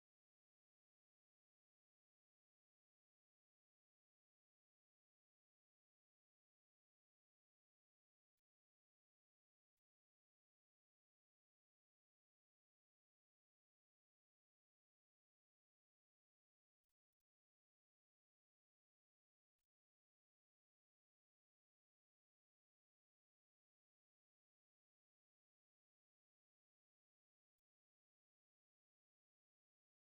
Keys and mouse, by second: 0.3 shift+middle click, 1.0 right click, 1.3 shift+right click, 2.1-2.7 f, 3.1 middle click, 6.3 shift+middle click, 7.3 right click, 7.9 ctrl+click, 9.0 right click, 9.3 shift+middle click, 9.7 shift+right click, 10.6 f, 10.9 middle click, 15.0 2, 15.4 right click, 16.1 ctrl+b, 22.9 middle click, 24.7 ctrl+z, 26.9 ctrl+r, 29.7 ctrl+z.